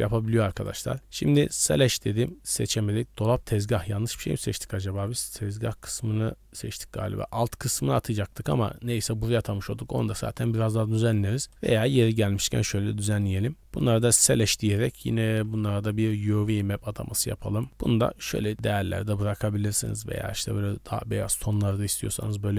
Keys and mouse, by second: 0.5 click, 1.4 click, 2.6 click, 8.3 middle click, 10.6 middle click, 13.1 middle click, 14.8 middle click, 15.4 u, 16.4 Tab, 16.6 middle click, 18.6 middle click, 19.8 click, 22.0 middle drag.